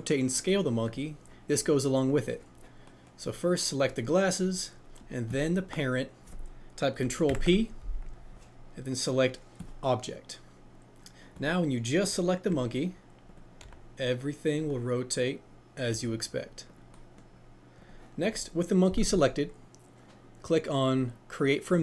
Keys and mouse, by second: 0.8 click, 3.8 click, 5.3 shift+click, 7.2 ctrl+p, 13.2-15.9 drag, 15.9 r, 16.6-17.3 drag, 18.2 click.